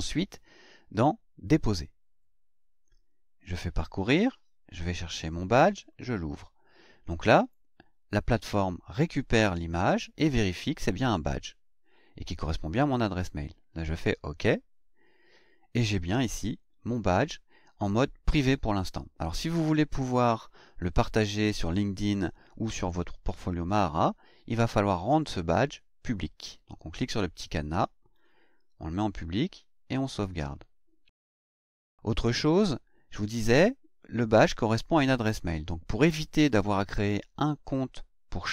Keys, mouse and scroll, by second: 1.6 click, 3.4 click, 4.7 click, 5.9 click, 13.8 click, 25.2 click, 28.1 click, 29.3 click.